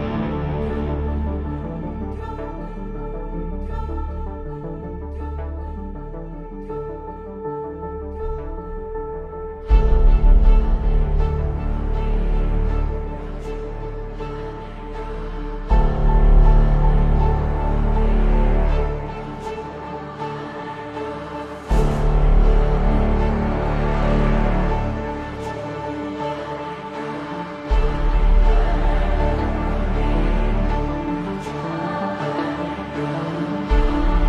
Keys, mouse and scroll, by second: 0.1 scroll down 1, 0.2 click, 0.7 Return, 1.0 click, 1.7 Return, 2.5 click, 2.9 Return, 3.3 click, 4.0 Return, 4.3 click, 4.8 Return, 5.0 Return, 5.3 click, 7.6 click, 8.4 right click, 8.6 click, 9.6 Return, 10.0 Return, 11.2 click, 11.6 click, 12.2 Return, 12.9 click, 13.2 click, 13.6 click, 14.0 click.